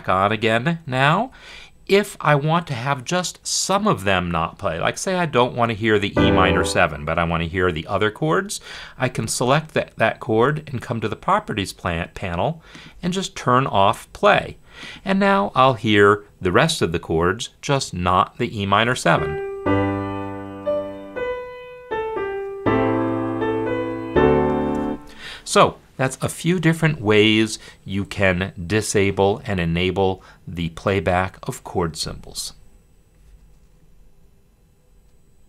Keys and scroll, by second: 1.2 F10, 18.7 space, 24.5 space.